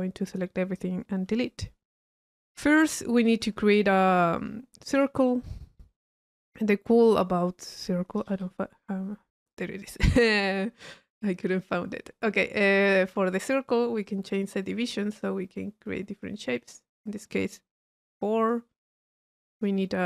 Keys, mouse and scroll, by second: 1.7 middle click, 2.3-3.1 drag, 3.3 click, 4.4 click, 5.1 c, 8.2 i, 9.5 click, 10.4-12.8 middle drag, 14.0-17.3 drag, 18.2-18.5 drag, 19.4 Tab.